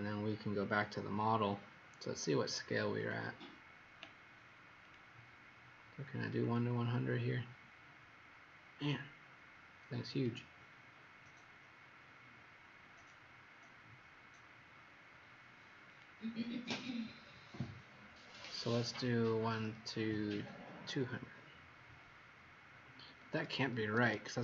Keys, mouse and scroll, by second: 2.4 click, 2.9 click, 4.7 click, 18.8-23.5 scroll down 9, 23.7 Escape, 24.0 Escape.